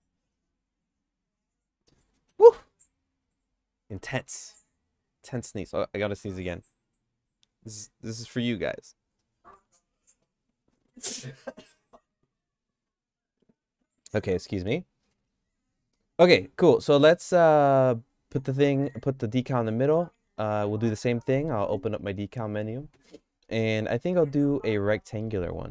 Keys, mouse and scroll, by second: 17.0 middle click, 17.4 shift+middle click, 18.3 click, 19.4 click, 19.9 click, 20.8 click, 23.0 d.